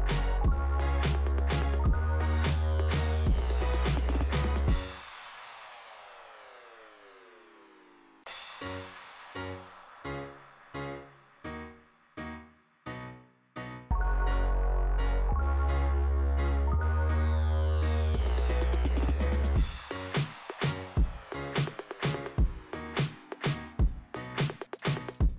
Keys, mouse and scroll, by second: 0.1 click, 0.9 click, 2.4 click, 3.9 click, 5.3 click, 6.5 click, 15.8 middle click, 16.5-17.2 scroll down 1, 17.6 click, 19.5 click, 21.4 click, 21.6 click, 25.2 click.